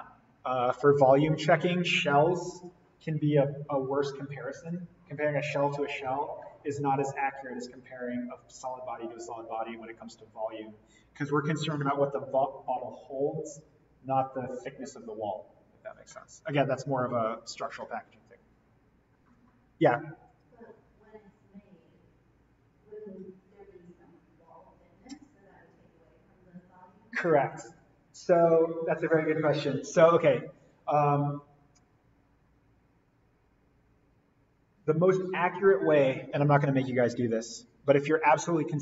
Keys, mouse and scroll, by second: 17.7 click, 20.4 click, 37.2 click.